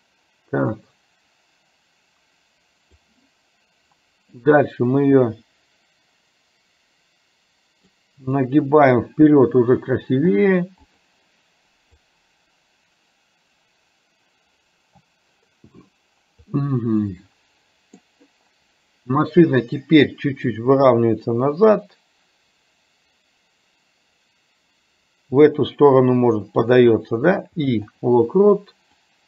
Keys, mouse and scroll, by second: 0.9-3.1 drag, 4.5-8.0 drag, 8.5-10.2 middle drag, 10.2 i, 12.1-15.9 drag, 16.5-18.1 middle drag, 20.6-27.1 drag, 27.4 i, 29.0-29.2 drag.